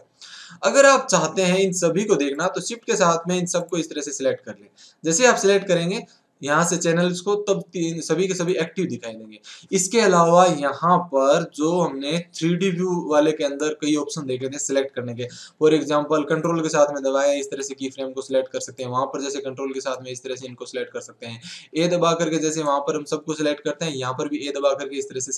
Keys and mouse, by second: 2.3-7.8 drag, 12.9 middle click, 19.9-21.4 drag, 21.4 a, 21.8 a, 22.2 a, 22.5-24.2 right drag.